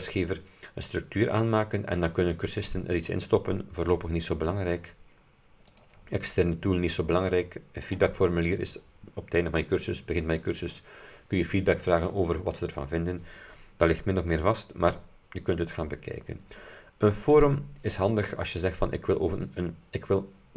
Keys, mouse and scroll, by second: 5.8 click, 7.9 click, 17.4 click.